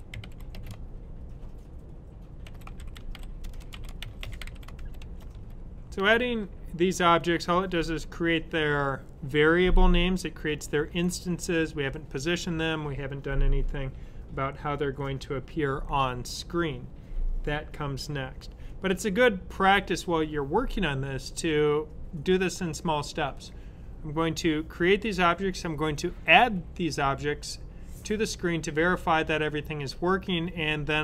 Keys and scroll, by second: 0.0-0.7 typing, 2.1-5.7 typing.